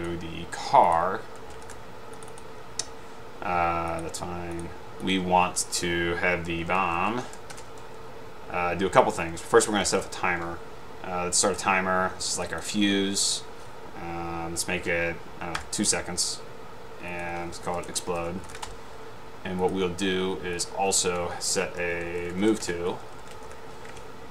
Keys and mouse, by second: 1.5-2.2 typing, 2.4 click, 4.7-5.3 drag, 6.8-7.8 typing, 9.5-10.5 typing, 11.6 click, 12.5 click, 12.7 click, 17.7-19.1 typing, 21.8-24.1 typing, 22.8 Return.